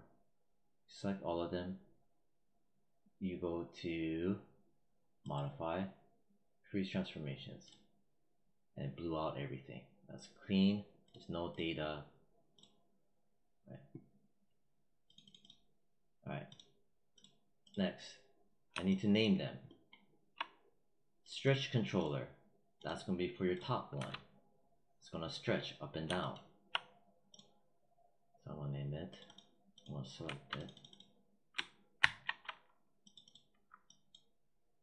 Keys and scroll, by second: 23.8 w, 31.8 ctrl+c.